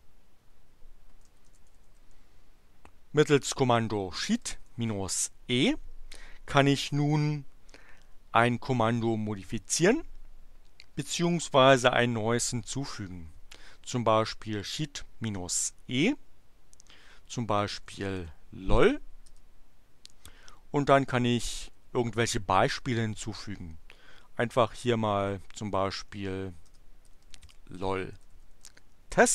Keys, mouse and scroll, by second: 1.0-2.4 typing, 4.1-5.0 typing, 14.3 space, 17.5-18.6 typing, 19.3 Return, 20.7-22.0 typing, 25.7 BackSpace, 26.7-29.1 typing.